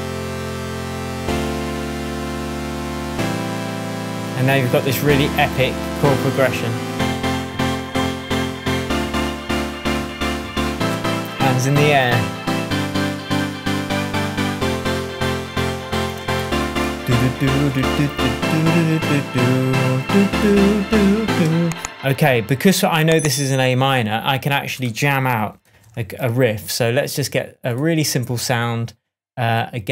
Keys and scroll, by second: 21.2 space, 25.6 shift+super+t.